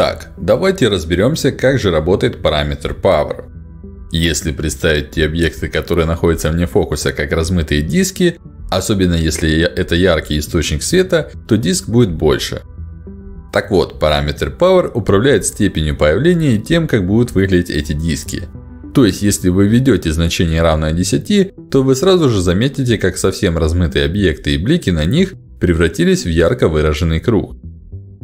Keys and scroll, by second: 20.4 1, 20.5 0, 20.9 Return, 27.1 1, 27.4 Return.